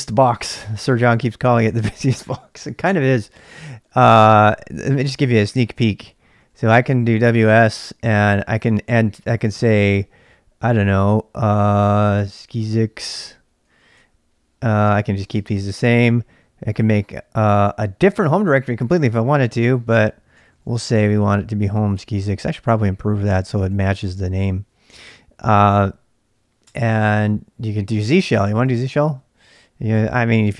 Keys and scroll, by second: 4.0-4.8 typing, 6.1-6.9 typing, 7.2 Return, 8.8-9.6 typing, 12.1-13.7 typing, 13.9 Return, 14.8 Return, 15.4 Return, 20.3-22.1 typing, 23.2-23.7 typing, 26.6 Return, 28.0-30.5 typing.